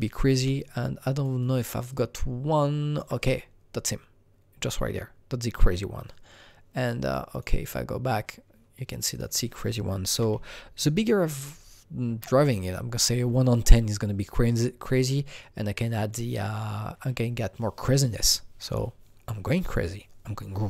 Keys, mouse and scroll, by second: 0.8 alt+click, 1.4 alt+double click, 1.9-5.4 alt+drag, 7.3-9.0 alt+drag, 9.0-10.1 alt+drag, 10.1 KP_0, 10.3 KP_Decimal, 11.2 KP_1, 12.0 KP_Enter, 14.9 KP_Enter, 14.9-18.5 drag, 14.9 KP_1.